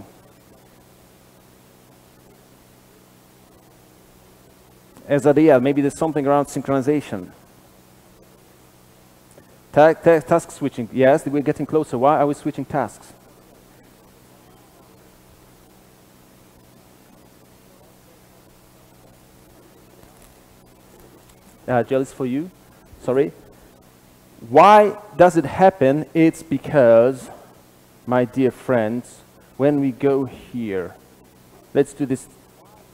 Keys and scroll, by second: 31.0 super+b.